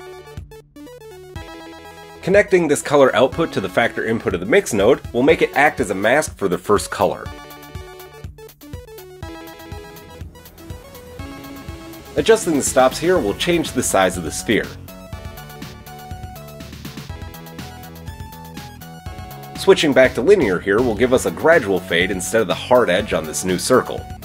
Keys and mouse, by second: 0.4-3.1 middle drag, 3.1-24.2 drag.